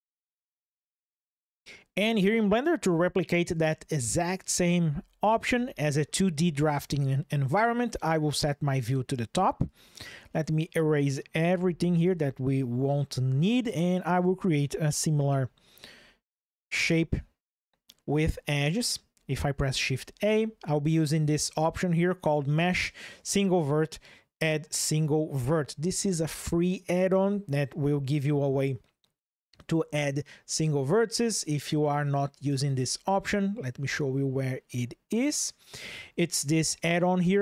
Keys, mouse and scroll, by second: 5.1 KP_7, 9.4 click, 11.4 Delete, 15.0 shift+click, 16.4-17.6 shift+drag, 19.7 shift+a, 31.5-32.6 drag.